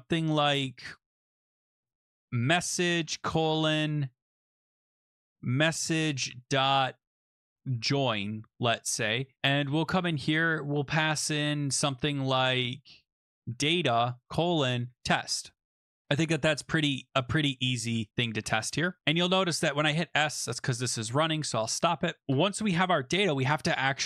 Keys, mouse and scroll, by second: 1.6-5.7 typing, 5.9 Tab, 7.3-9.9 typing, 8.8 Return, 13.0-15.5 typing, 15.7 click, 16.2 click, 17.0 BackSpace, 18.1 scroll down 3, 18.3 ctrl+s, 20.5 click, 21.8 click, 22.3 Return.